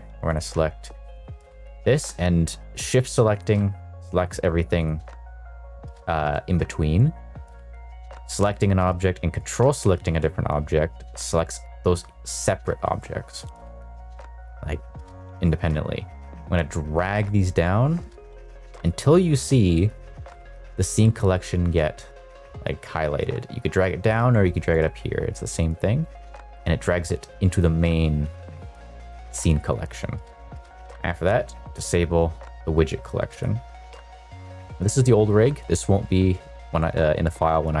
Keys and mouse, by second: 3.2 shift+click, 4.7 shift+click, 15.7 click, 16.2 click, 31.7 click, 33.3 click.